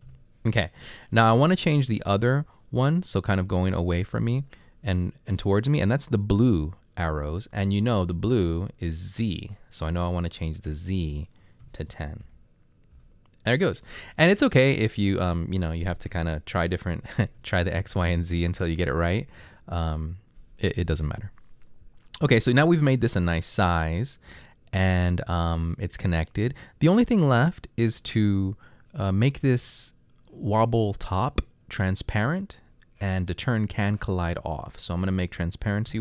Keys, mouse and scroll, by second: 0.1 Return, 3.6-4.4 typing, 11.6-12.2 typing, 13.0 Return, 14.4-15.1 scroll down 3, 16.2-18.0 typing, 35.9 1.